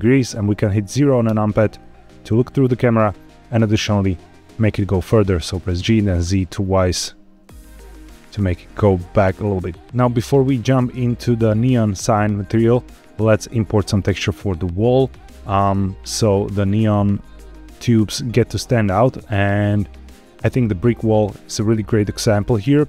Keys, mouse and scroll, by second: 1.2 KP_0, 5.7 g, 6.0 z, 6.2 z, 9.1 click, 11.1-14.1 scroll up 1.